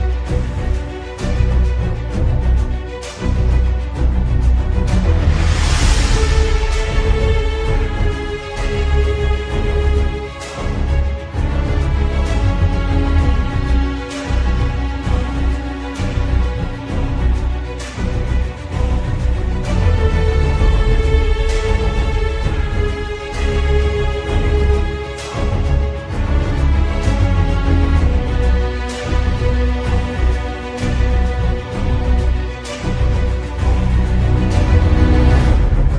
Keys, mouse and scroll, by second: 0.1 shift+middle click, 1.2 middle click, 1.4 shift+a, 2.8 click, 5.3 click, 6.5 middle click, 6.5-7.1 scroll up 6, 7.3 click, 7.9 scroll down 2, 8.1 scroll up 2, 8.2 scroll down 1, 8.2 scroll down 2, 8.3 scroll up 2, 8.7 shift+middle click, 9.2 scroll up 1, 10.3 click, 10.9 click, 11.2-11.8 scroll down 4, 11.3 shift+middle click, 11.8 shift+d, 12.4 click, 13.9 click, 14.3 click, 15.2 middle click, 16.3 click, 17.4 middle click, 18.5 shift+a, 20.2 click, 21.0 scroll down 4, 21.3-21.8 scroll up 4, 21.8 middle click, 22.5 scroll down 5, 22.7 shift+middle click, 23.9-24.4 scroll up 6, 24.3 shift+middle click, 25.0 scroll up 1, 25.5 shift+a, 27.3 shift+middle click, 27.9 click, 29.8-30.3 scroll down 2, 30.2 scroll up 1, 30.3 shift+a, 31.1 shift+a, 33.2 click, 35.3-35.7 scroll up 1, 35.7 shift+middle click.